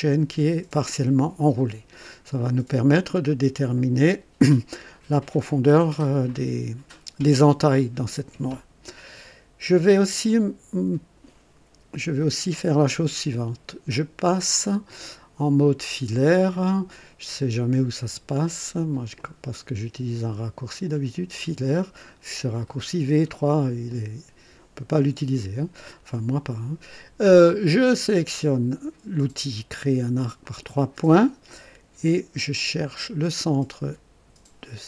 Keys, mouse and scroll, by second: 1.6 right click, 9.7 scroll up 1, 10.2-11.3 right drag, 19.1 click, 24.9 click, 30.4 click.